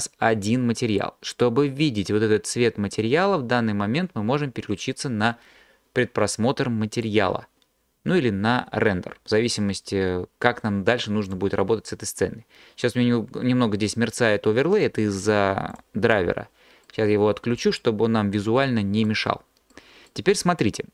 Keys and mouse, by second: 7.2 click, 15.7 click.